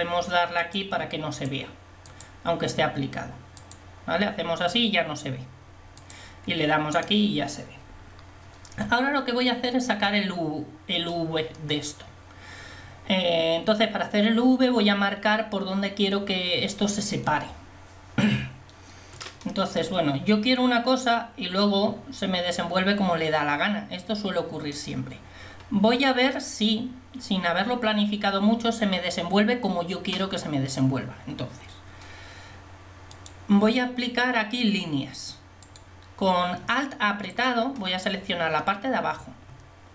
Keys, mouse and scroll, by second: 8.9 Tab, 33.2-34.9 drag.